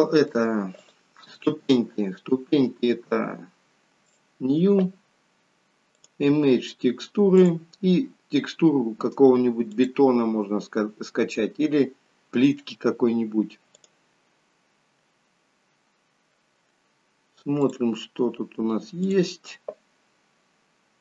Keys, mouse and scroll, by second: 0.8 click, 4.1 click, 6.1 click.